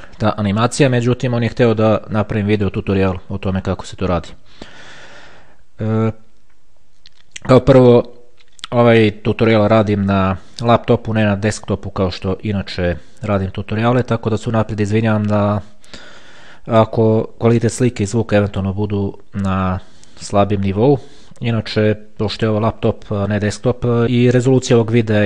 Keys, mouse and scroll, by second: 0.6-2.6 scroll down 3, 2.6-3.1 scroll up 2, 3.1-5.6 scroll up 1, 5.6-6.3 scroll up 1.